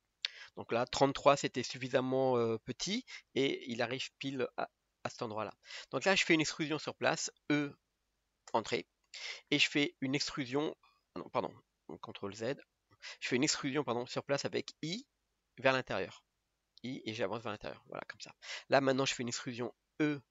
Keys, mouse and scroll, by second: 4.9-5.3 scroll up 1, 5.3-7.6 middle drag, 7.6 e, 12.3 ctrl+z, 15.0 i.